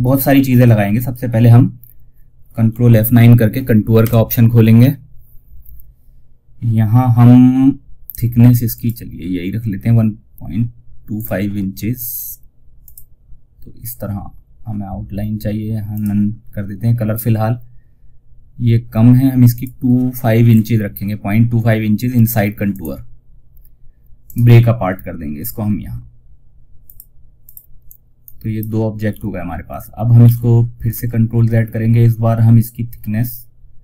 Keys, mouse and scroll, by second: 3.3 ctrl+F9, 6.0 typing, 8.0 click, 10.4 click, 14.5 typing, 15.2 click, 18.8 click, 22.0 click, 23.5 right click, 26.1 click, 28.4 z, 29.5 ctrl+z, 30.2 space.